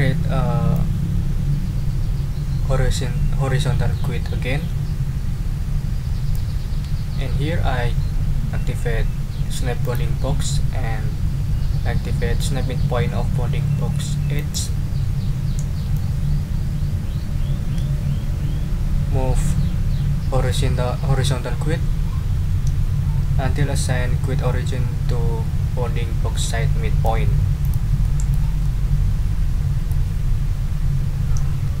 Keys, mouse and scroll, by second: 0.7-6.5 drag, 9.8 click, 14.3 click, 15.9-27.2 drag, 27.6 click, 28.0 click, 28.6-30.1 drag.